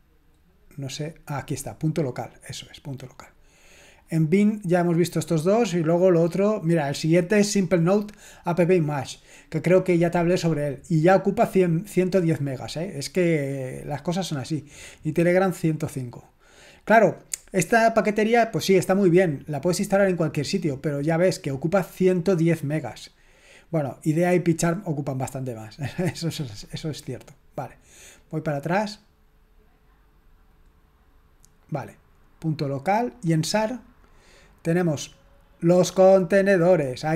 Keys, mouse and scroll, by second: 0.6-2.4 scroll up 3, 2.6 click, 3.8 click, 30.5-31.4 scroll up 3, 33.2-33.7 scroll down 2, 35.1 click, 36.1 click.